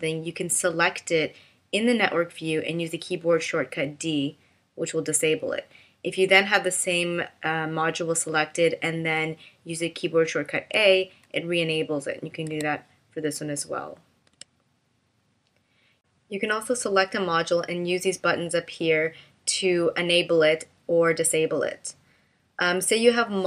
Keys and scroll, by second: 3.8 d, 10.6 a, 12.5 a, 14.3 d.